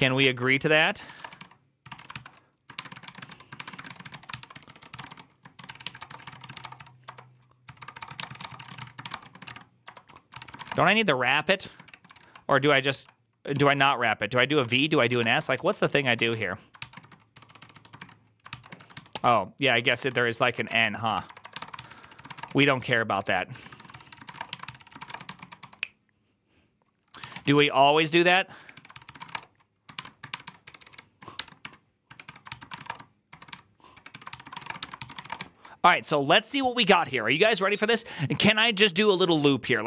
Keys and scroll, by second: 0.0-35.7 typing, 4.1 ctrl+c, 12.0 ctrl+g, 14.5 ctrl+c, 18.4 ctrl+c.